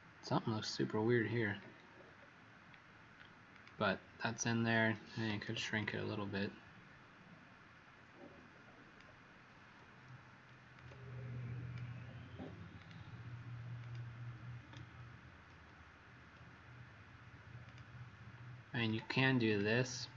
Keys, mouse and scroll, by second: 1.9-2.4 alt+scroll down 2, 3.4 click, 5.7 ctrl+shift+click, 10.7 click, 12.7 click, 13.7 click, 15.4 ctrl+d, 17.6 click, 19.4 click.